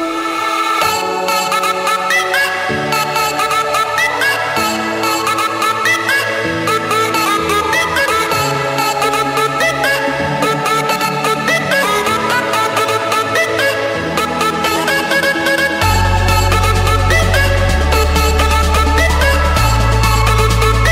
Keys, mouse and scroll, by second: 0.6 click, 2.3 click, 3.3-4.1 scroll down 3, 5.1-5.5 scroll up 2, 5.5 Escape, 6.2 scroll, 6.4 right click, 8.2 click, 10.7 click, 13.4 scroll, 14.7-15.6 scroll, 15.6 scroll, 17.3 Escape, 17.7-18.4 typing, 18.5 Return, 19.7 click, 20.1 Return.